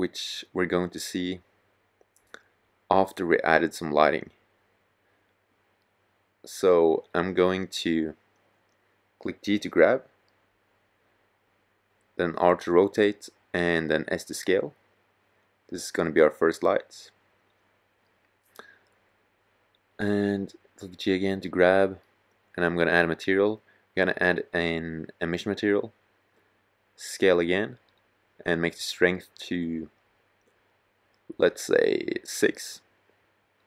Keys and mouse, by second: 1.4-5.3 drag, 5.7 middle click, 5.8 middle click, 6.3 middle click, 6.6-8.2 drag, 8.2-8.8 middle drag, 10.4 r, 11.5-12.0 drag, 12.0 g, 13.5 click, 13.8 click, 15.0 r, 16.3 s, 19.9 g, 25.8 s.